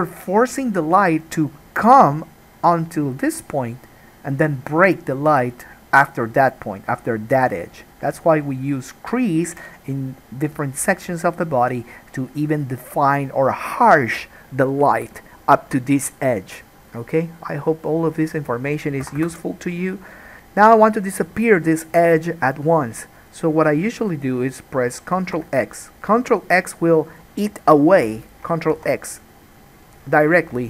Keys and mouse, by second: 20.4-27.2 middle drag, 20.4 2, 25.4 ctrl+x, 27.2 click, 27.3-30.6 middle drag, 28.9 ctrl+x.